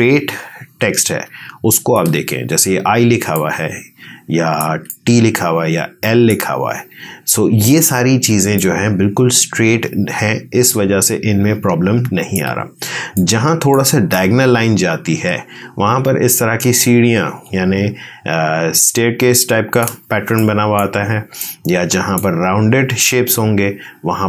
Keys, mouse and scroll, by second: 4.8-8.4 ctrl+drag, 8.4-14.0 ctrl+drag, 14.0-23.0 ctrl+drag, 23.0-24.2 ctrl+drag.